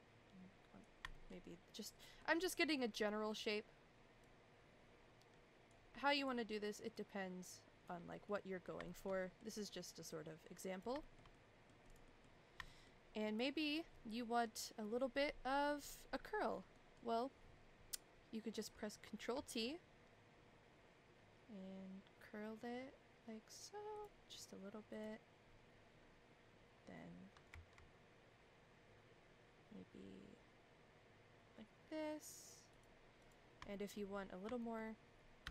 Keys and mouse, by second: 1.1 shift+middle click, 1.4 middle click, 2.7 middle click, 3.4 click, 4.2-5.7 drag, 6.2 click, 7.0 click, 8.2 middle click, 8.8 shift+middle click, 9.2 middle click, 10.0 click, 11.0 shift+middle click, 11.3 middle click, 11.9 click, 12.0 middle click, 12.6 shift+middle click, 16.7 middle click, 19.3 ctrl+t, 24.9 click, 27.5 ctrl+t, 33.2 click, 33.7 shift+middle click, 34.6 shift+middle click, 35.4 a.